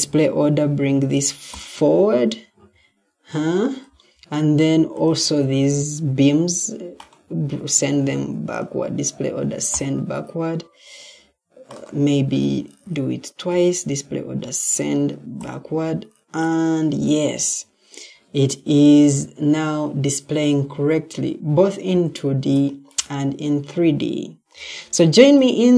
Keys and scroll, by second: 2.4 Escape.